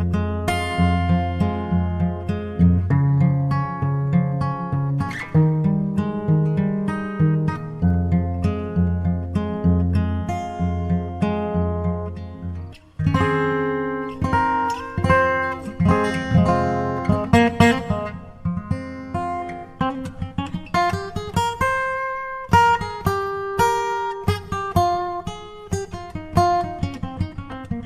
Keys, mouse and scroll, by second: 1.6-2.9 drag, 2.6 g, 7.6-8.7 drag, 8.6 g, 12.9-14.1 drag, 14.5 alt+a.